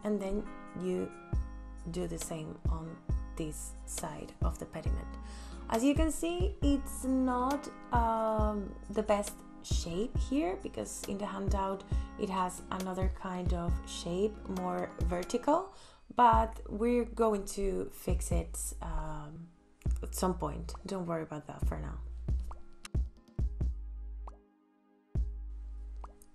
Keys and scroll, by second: 0.5 l, 4.9 space.